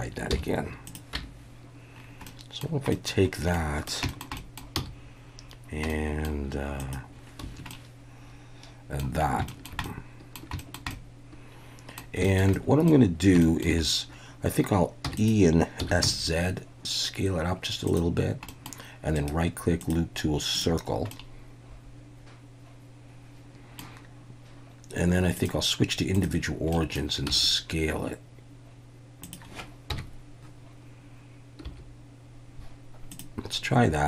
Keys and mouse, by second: 0.3 h, 1.1 Tab, 2.3 middle click, 2.9 middle click, 3.5-3.9 middle drag, 4.1 shift+middle drag, 4.4 middle click, 4.8 c, 7.4 Escape, 7.7-9.0 middle drag, 9.5 shift+middle click, 9.8 middle click, 10.6 shift+middle click, 10.9-12.0 middle drag, 12.2 shift+middle click, 12.6 middle click, 13.4 shift+middle drag, 15.0 e, 15.2 click, 16.0 s, 16.0 z, 17.8 click, 18.5 click, 19.2-20.6 right drag, 21.1-23.8 middle drag, 25.4-26.2 drag, 26.7 middle click, 27.3 s, 29.2 click, 29.9 KP_1, 31.6 s, 33.1 click.